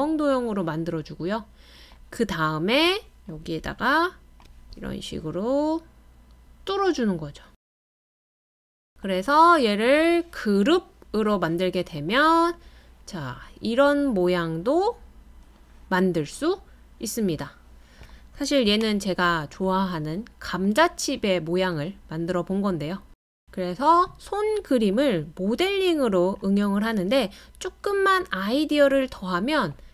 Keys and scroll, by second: 25.9 super+d, 26.3 super+d, 26.5 super+d.